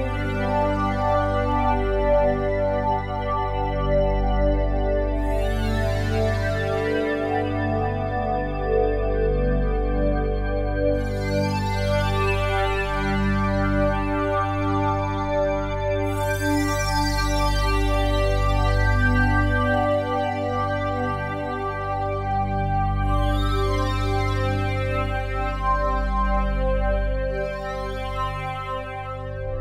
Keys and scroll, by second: 5.0 z, 6.5 z.